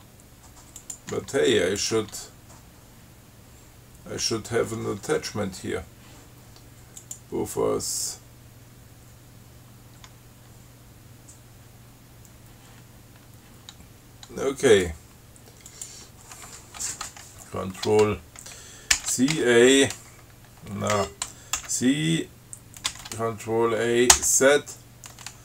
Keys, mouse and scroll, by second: 1.0 click, 1.4 Tab, 2.0 click, 2.3 Tab, 7.3 click, 15.0 click, 16.0 click, 19.2 ctrl+c, 19.6 ctrl+a, 21.2 ctrl+g, 21.8 ctrl+c, 23.1 ctrl+a, 24.4 z.